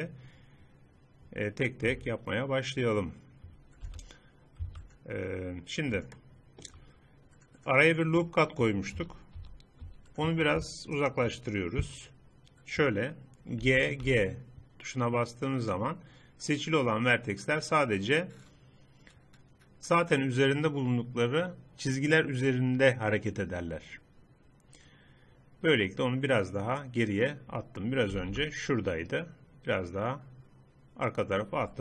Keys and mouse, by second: 3.9 z, 9.0 a, 9.4 a, 9.9 a, 13.7 g, 28.2 g.